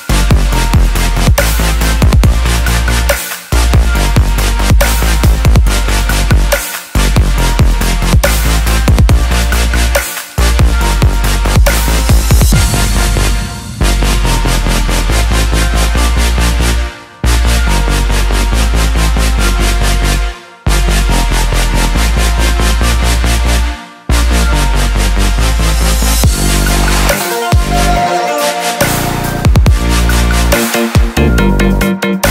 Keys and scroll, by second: 3.1 ctrl+j, 14.4-16.7 typing, 21.9-23.9 typing.